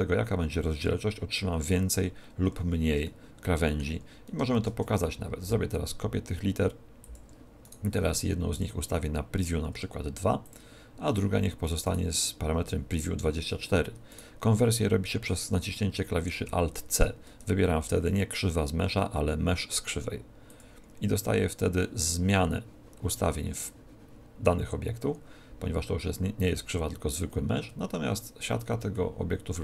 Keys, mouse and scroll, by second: 2.5-3.2 scroll down 3, 3.0 shift+middle click, 4.5 shift+d, 7.1 ctrl+click, 7.6 right click, 8.5 click, 11.8 right click, 14.1 right click, 16.5 alt+c, 27.5 Tab, 28.2 scroll up 4, 28.9 shift+middle click.